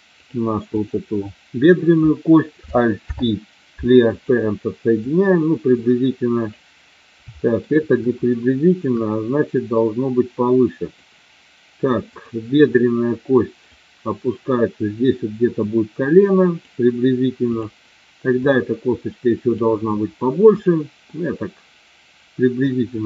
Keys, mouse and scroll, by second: 0.1 click, 0.7 click, 3.0 alt+p, 5.1-6.4 drag, 7.5 shift+middle click, 8.2 shift+click, 9.7-11.0 drag, 12.1 click, 13.6-16.6 drag, 18.5-19.6 drag, 20.9-22.6 middle drag.